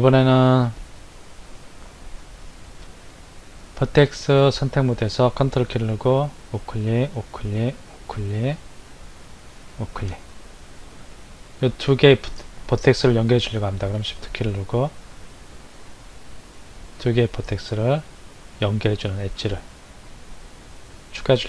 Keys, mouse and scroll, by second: 6.1 ctrl+right click, 7.1 ctrl+right click, 7.8 ctrl+right click, 9.7 ctrl+right click, 14.2 shift+click.